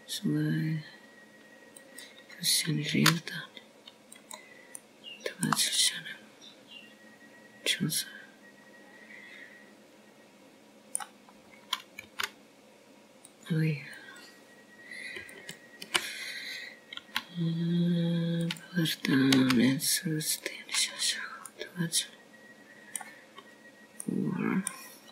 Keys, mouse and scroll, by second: 0.2 right click, 2.1 s, 5.9 g, 7.6 middle click, 8.8 middle click, 14.2 scroll up 1, 14.9 g, 16.8 click, 18.2 alt+click, 19.9 s, 22.2 g, 23.9 scroll down 2, 24.3 middle click.